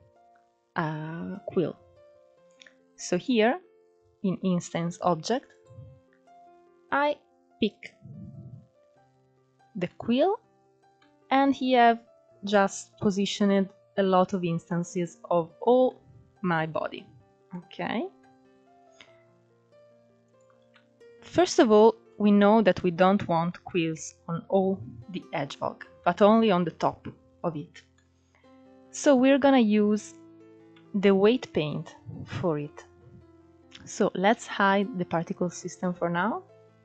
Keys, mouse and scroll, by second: 4.2 click, 8.0-8.5 scroll up 1, 8.5-9.1 shift+middle drag, 9.1 scroll up 4, 9.6-10.7 middle drag, 10.7-11.1 scroll down 3, 11.1-15.6 middle drag, 15.6 scroll up 3, 16.1 shift+middle click, 16.7 scroll down 2, 16.8-18.8 middle drag, 18.8 click, 19.3-21.0 middle drag, 21.0 scroll down 3, 21.3-21.8 middle drag, 21.8-22.3 scroll up 1, 22.3-23.7 middle drag, 23.7-24.6 scroll up 1, 24.6-26.1 middle drag, 26.1-26.5 scroll down 1, 26.5-27.7 middle drag, 27.7 click, 29.3-31.5 shift+middle drag, 31.5-32.0 scroll up 10, 33.4 click.